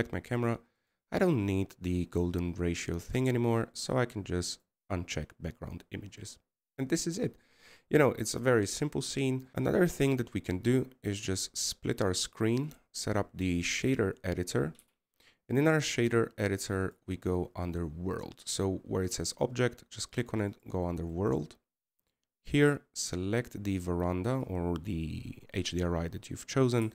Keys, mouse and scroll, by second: 6.7-8.1 scroll up 1, 9.1-9.5 scroll down 1, 22.3-23.2 scroll up 5.